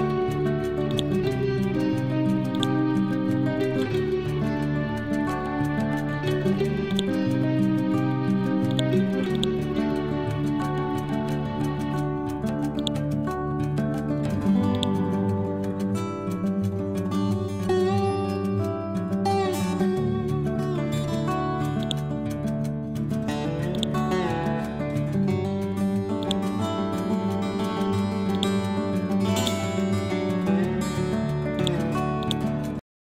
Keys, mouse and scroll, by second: 0.9 ctrl+click, 1.4 scroll up 1, 2.6-4.7 drag, 4.7 scroll down 1, 6.9 click, 7.5 click, 7.6 scroll up 1, 8.8-13.2 drag, 13.2 scroll down 1, 13.9-14.8 scroll up 1, 14.8-17.3 drag, 17.3 Left, 22.3 scroll down 1, 23.0-23.8 scroll up 1, 23.8 click, 24.8 Left, 26.3 click, 26.7 scroll down 1, 28.3-31.6 drag.